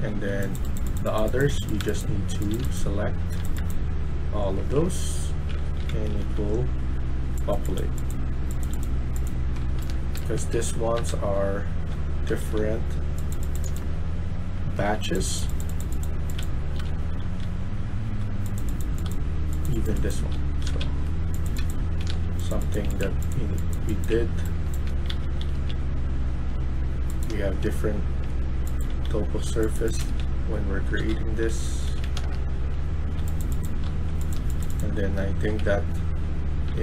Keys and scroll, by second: 0.0-0.1 typing, 1.6-6.3 typing, 9.3-14.6 typing, 16.0-36.8 typing.